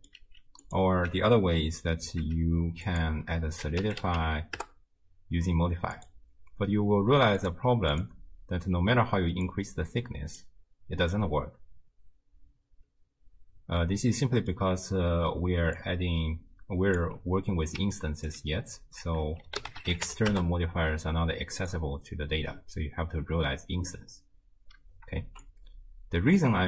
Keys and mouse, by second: 2.1 m, 2.9-4.6 drag, 6.0 click, 7.4 click, 7.9 click, 9.5 click, 13.8 middle click, 15.5 d, 15.8-17.0 drag, 17.0 d, 17.8 d, 17.9 click, 18.3 d, 19.1 ctrl+a, 25.4-26.6 shift+drag.